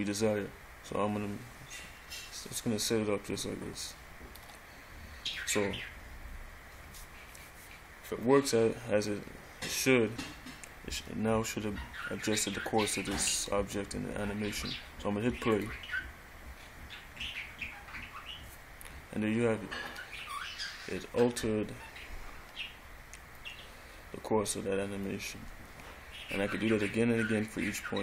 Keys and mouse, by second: 4.0 click, 5.9 middle click, 8.4-11.3 middle drag, 15.7 click, 20.3-22.2 middle drag, 23.5-25.0 middle drag.